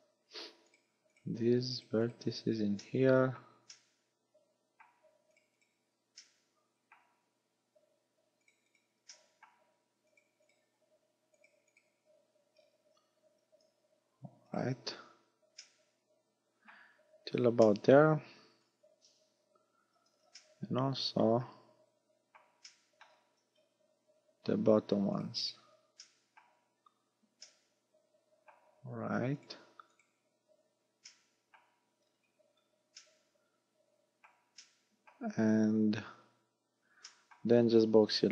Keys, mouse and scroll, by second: 0.7 right click, 1.2 shift+right click, 1.9 right click, 2.1 shift+right click, 2.8 middle click, 3.8 shift+middle click, 5.4 shift+right click, 5.6 shift+right click, 6.2 shift+middle click, 8.5 shift+right click, 8.8 shift+right click, 9.2 shift+middle click, 10.1 shift+right click, 10.5 shift+right click, 11.4 shift+right click, 11.8 shift+right click, 12.6 scroll down 5, 13.6 g, 14.6 right click, 15.6 middle click, 17.0-17.4 scroll down 4, 17.8 shift+middle click, 20.2 z, 20.4 middle click, 22.7 shift+middle click, 23.4-24.0 scroll up 5, 24.2-24.6 scroll up 3, 25.2 shift+right click, 25.4 shift+right click, 26.0 shift+middle click, 27.5 shift+middle click, 29.4 shift+right click, 30.0 shift+right click, 31.1 shift+middle click, 32.1 scroll down 5, 33.0 middle click, 34.6 shift+middle click, 36.3 scroll down 3, 37.1 shift+middle click, 37.6-37.9 scroll down 2.